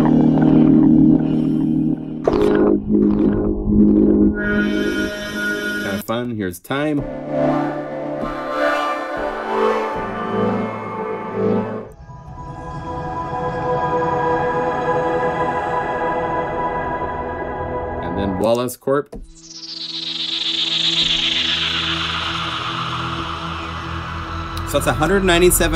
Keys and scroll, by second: 23.1 F1.